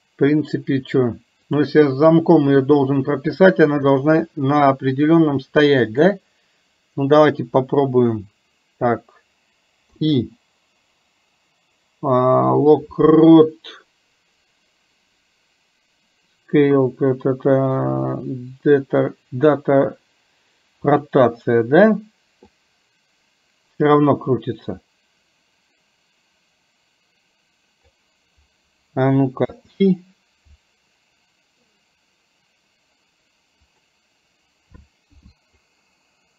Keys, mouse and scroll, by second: 1.5 click, 6.0 click, 22.6-28.1 drag, 35.8-36.3 drag.